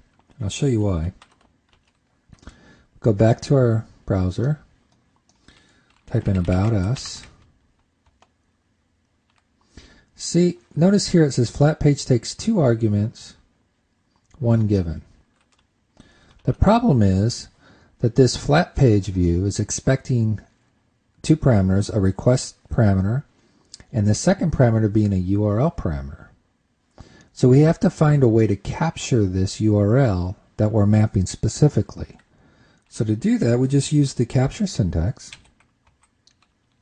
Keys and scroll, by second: 1.3 super+s, 2.2 super+Tab, 16.8 super+Tab.